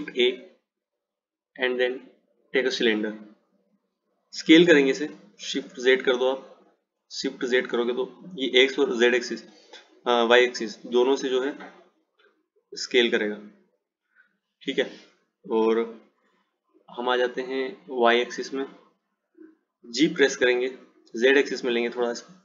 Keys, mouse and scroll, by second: 18.1 click, 20.4 g.